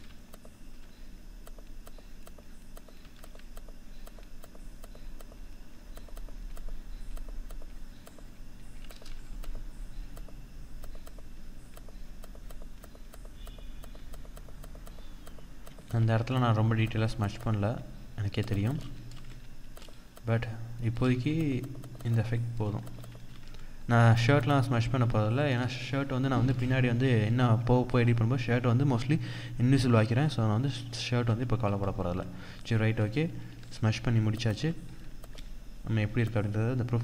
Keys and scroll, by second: 20.6 ctrl+=, 22.5 ctrl+-, 25.1 ctrl+0, 30.6 ctrl+d, 32.5 ctrl+=, 34.4 ctrl+=.